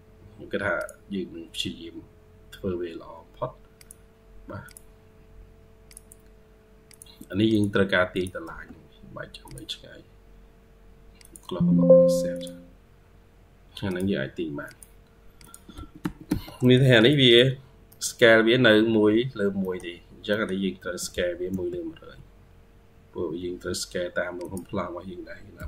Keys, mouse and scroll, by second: 4.9 scroll up 1, 8.3 space, 12.8-13.3 scroll up 1, 15.9 Escape, 16.1 Escape, 16.3 scroll down 1, 16.5 middle click, 17.1 double click, 17.5 scroll down 2, 19.2 scroll down 2, 19.5 middle click, 20.2 middle click, 20.7 typing, 21.7-22.4 scroll up 3, 21.8-22.9 typing, 25.4-25.6 typing.